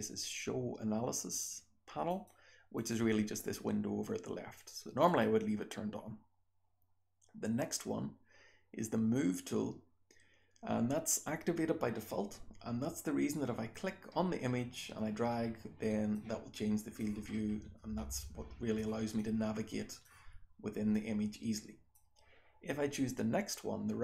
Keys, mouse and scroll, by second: 2.1 click, 2.7 click, 4.5 click, 5.0 click, 13.7-16.1 drag, 16.5-16.9 drag, 17.2-17.7 scroll up 1, 17.7-18.7 scroll down 1, 18.1-18.7 drag, 18.7-20.0 scroll down 1, 19.2-20.0 drag, 20.0-20.9 scroll down 1, 20.9-21.9 drag, 20.9-21.9 scroll down 1, 21.9-24.0 scroll down 1.